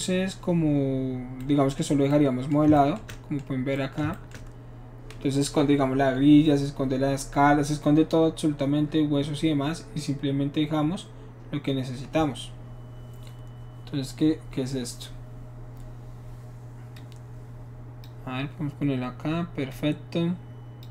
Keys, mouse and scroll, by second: 16.9-18.0 drag, 19.7-20.8 drag.